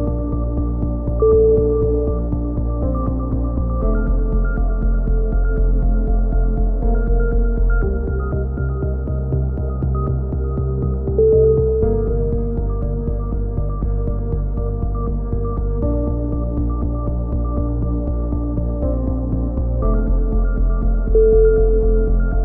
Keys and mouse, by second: 0.0-2.2 middle drag, 4.4-5.4 right drag, 5.2 z, 5.4 middle click, 5.6 right click, 6.2 middle click, 6.9 e, 9.0-10.5 middle drag, 10.5-11.6 right drag, 11.2 click, 13.2 middle click, 13.5-15.4 drag, 15.7-16.8 right drag, 16.8 middle click, 17.0 right click, 17.8 e, 21.2 r.